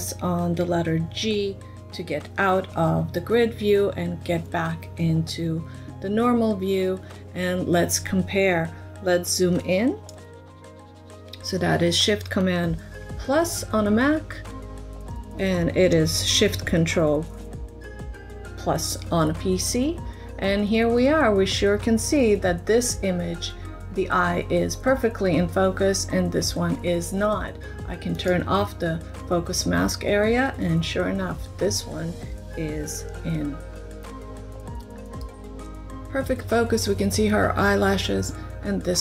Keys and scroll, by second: 1.0 g, 12.8 shift+super+=, 33.2 shift+space.